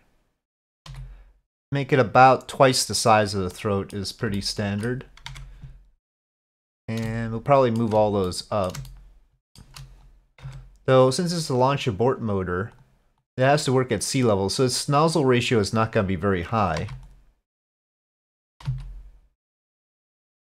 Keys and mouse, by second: 0.9 s, 3.6 middle click, 4.4 shift+click, 5.3 Tab, 6.3 click, 7.1 shift+middle click, 8.3-8.7 middle drag, 8.9-9.6 shift+middle drag, 10.5 Tab, 12.2 click, 12.8 click, 13.8-15.1 drag, 16.8 3, 17.0 click, 18.7 s.